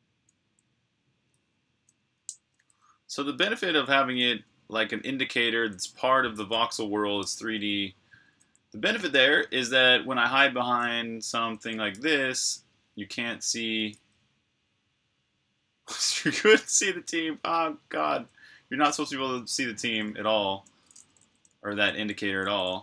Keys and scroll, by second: 1.7 typing, 3.5-5.0 typing, 8.9-11.8 typing, 13.7 v, 18.9-22.5 typing.